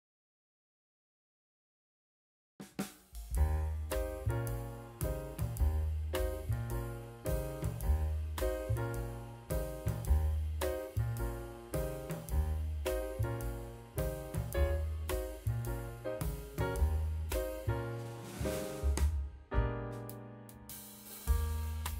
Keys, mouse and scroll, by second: 0.3 s, 1.3 click, 2.2 s, 5.8 click, 6.2 click, 6.4 s, 8.3 click, 9.4 drag, 9.6-10.0 middle drag, 10.4 click, 10.7 click, 11.7 click, 12.0 Tab, 12.2 click, 13.1 3, 13.2 click, 13.7 g, 17.0 Tab, 17.2 click, 17.7-19.1 drag, 19.3 middle drag, 19.8 click, 20.3 middle click, 20.5-20.8 scroll up 2, 20.7 middle drag, 21.1 scroll down 1, 21.3 shift+middle click, 21.7 click.